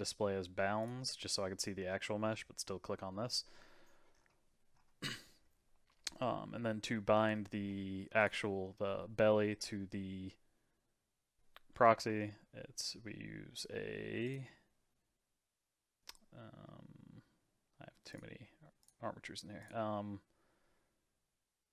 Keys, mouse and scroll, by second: 1.4-6.1 middle drag, 8.2 click, 14.2 click, 16.6-18.1 scroll down 2, 18.1-21.7 drag.